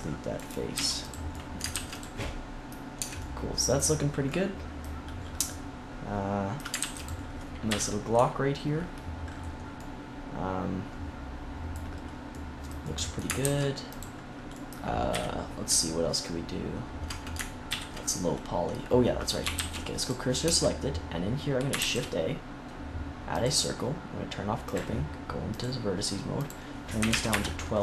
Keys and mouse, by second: 0.6 x, 1.3 middle click, 1.6 ctrl+s, 2.9 Tab, 6.7 ctrl+s, 7.6 KP_3, 13.3 ctrl+s, 15.0 KP_3, 17.6 ctrl+KP_3, 19.4 shift+s, 20.3 Tab, 21.7 shift+a, 24.8-25.8 drag.